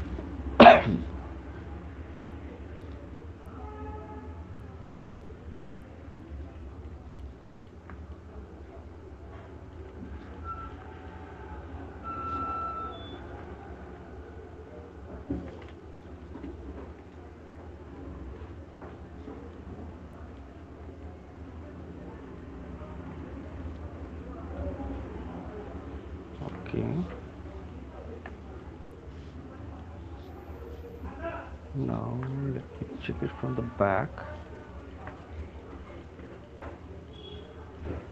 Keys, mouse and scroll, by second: 2.8 alt+click, 7.6 right click, 7.9 alt+click, 9.9 shift+click, 10.9 alt+click, 12.5 shift+click, 13.4 alt+click, 16.1 f, 18.7 click, 20.6 alt+click, 22.6 alt+click, 22.6 click, 25.6 alt+click, 26.7 alt+click, 27.4 f, 29.2 click, 29.4 alt+click, 34.0 click, 35.2 alt+click, 36.7 shift+click, 37.6 click, 37.9 click.